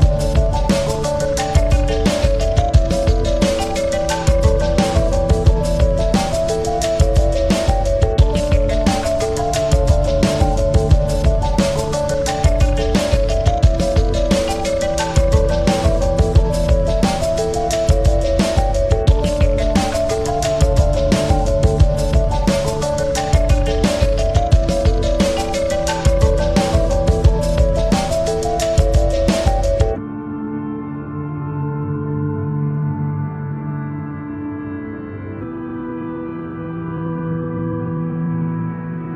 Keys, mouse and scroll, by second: 4.3-10.1 typing, 9.5 Tab, 10.3 Tab, 11.2 Return.